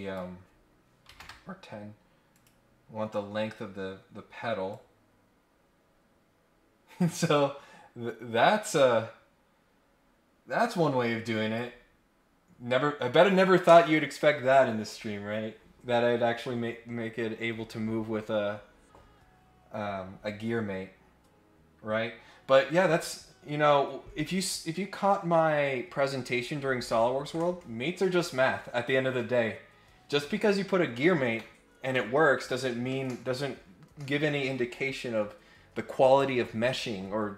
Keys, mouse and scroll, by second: 2.3 click, 4.7-11.5 drag, 11.9 scroll up 2, 12.1-12.7 scroll down 2, 12.7 scroll up 1.